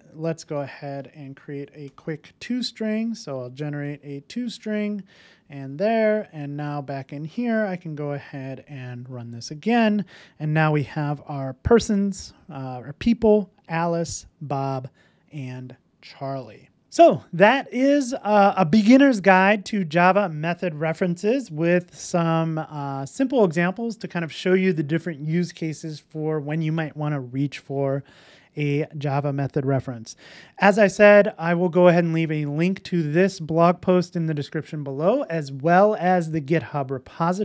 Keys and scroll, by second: 3.0 super+n, 5.5 super+s, 7.6 ctrl+shift+r.